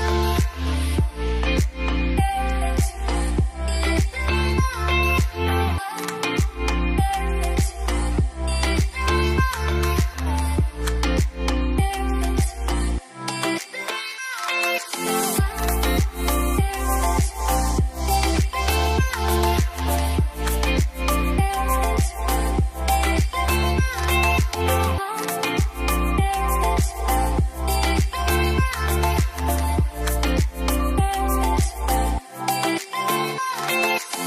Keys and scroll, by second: 3.0-3.7 typing, 5.1 0, 7.4 `, 27.9 `.